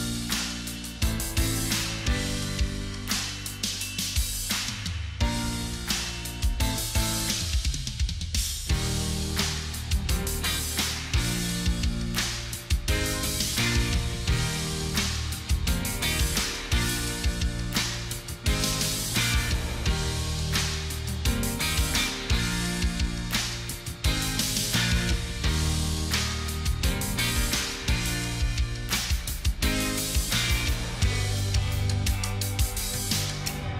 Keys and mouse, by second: 0.5 ctrl+click, 4.8 ctrl+click, 11.3 ctrl+d, 18.6 ctrl+alt+shift+e, 20.8 right click, 24.9 ctrl+click, 26.8 ctrl+t.